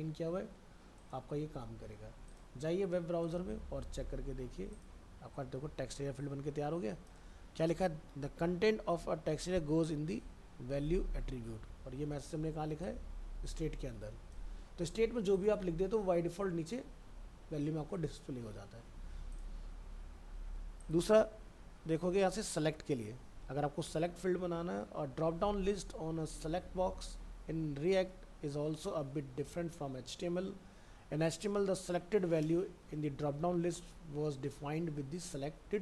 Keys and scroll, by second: 3.9 alt+Tab, 11.1 alt+Tab, 19.9 alt+Tab.